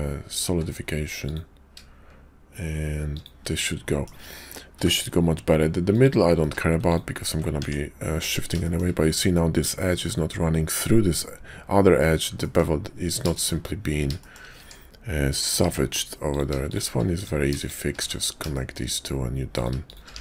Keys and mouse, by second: 0.4 q, 3.6 click, 4.7 h, 5.9 click, 6.3 q, 7.6 Tab, 8.6 shift+middle click, 12.4 shift+middle click, 13.3 shift+click, 14.1 shift+click, 14.6 Tab, 15.6 Tab, 16.2 click, 17.0 click, 17.9 1, 18.5 shift+click, 19.5 click, 19.8 shift+click, 20.1 1.